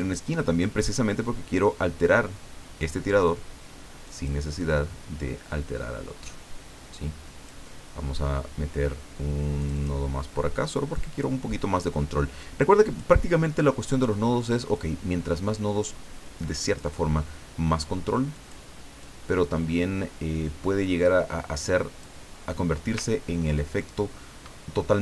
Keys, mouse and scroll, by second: 0.0 click, 4.0 click, 4.6-7.6 drag, 9.6 click, 10.9-13.2 drag, 14.7-16.9 drag, 18.3 click, 19.0-22.4 drag, 23.0-23.4 ctrl+scroll down 2, 23.8 ctrl+middle click.